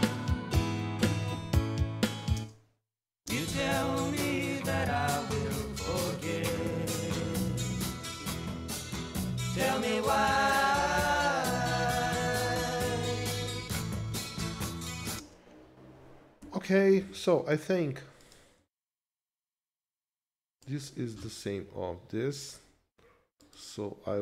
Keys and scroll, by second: 2.3 space, 4.2 ctrl+Left, 15.3 space, 16.9 ctrl+Left.